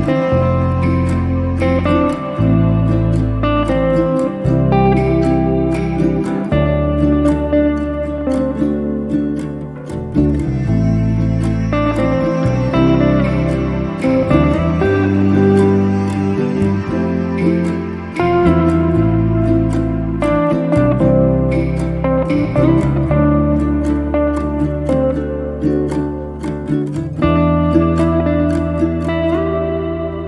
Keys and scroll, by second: 7.3 m, 16.5 m, 17.9 space.